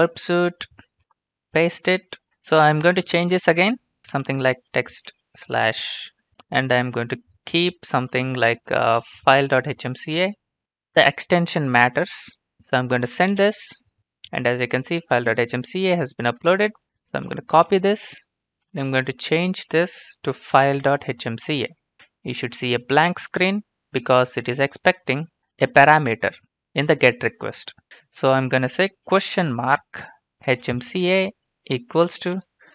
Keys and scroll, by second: 1.4 ctrl+v, 3.7-6.3 typing, 9.0-9.9 typing, 13.3 ctrl+space, 17.1 ctrl+c, 17.8 alt+Tab.